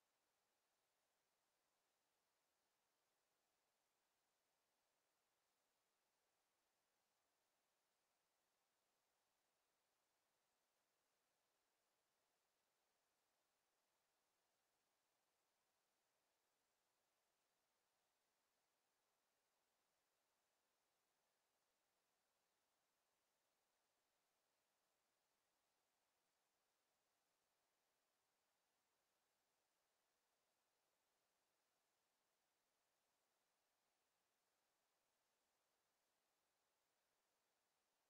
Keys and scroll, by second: 2.5 e, 12.5 w.